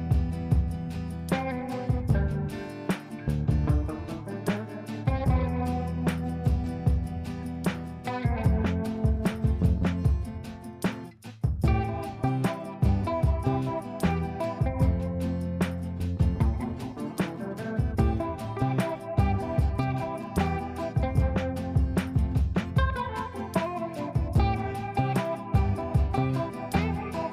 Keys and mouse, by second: 0.5-1.8 typing, 3.6-5.2 drag, 7.4 F3, 8.7 shift+click, 9.6 l, 10.1 click, 10.4 F2, 10.7-11.4 click, 12.7 shift+click, 13.0 shift+c, 13.3 click, 17.1 shift+click, 17.8-18.2 click, 18.4 ctrl+z, 18.9 shift+click, 19.3 x, 19.7 click, 20.8 c, 21.4 ctrl+space, 22.3 click, 23.4 shift+click, 23.9-25.1 typing, 25.9 shift+click, 26.6 b, 27.1 click.